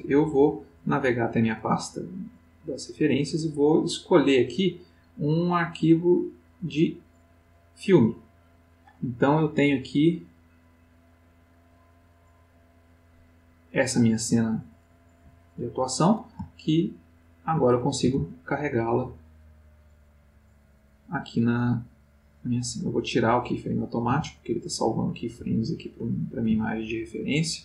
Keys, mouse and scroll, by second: 1.3 click, 3.9 click, 4.3 click, 5.3 click, 7.0 click, 11.8 click, 13.9 click, 16.5-17.6 ctrl+middle drag, 18.2 s, 19.9 click, 23.0 click, 24.1 x, 24.4 click, 25.4 g, 26.2 ctrl+click, 26.8-27.6 ctrl+middle drag.